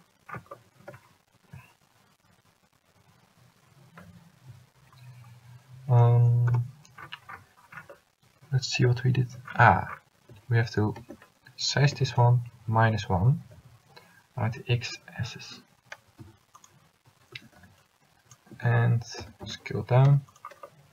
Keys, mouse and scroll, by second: 4.5 ., 6.6 KP_Decimal, 10.5 a, 11.1 a, 12.0 l, 12.9 s, 17.5 a, 17.9 c, 19.4 s.